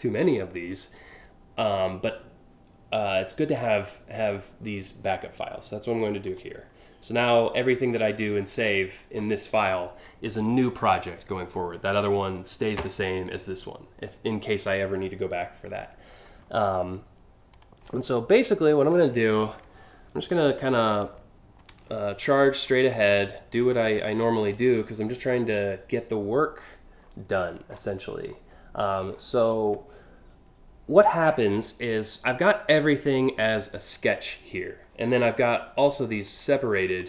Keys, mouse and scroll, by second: 5.9 click, 7.1 click, 7.5 click, 17.2 click, 18.0 scroll up 3, 18.3 scroll down 3, 19.2 scroll up 1, 20.0 alt+scroll up 1, 22.2 click, 22.6 click, 23.2 click, 23.6 ctrl+click, 24.1 click, 25.1 click, 26.7-27.5 scroll down 4, 27.8 scroll down 1, 28.7 alt+scroll down 1, 32.0 click, 35.9 click, 36.5 click.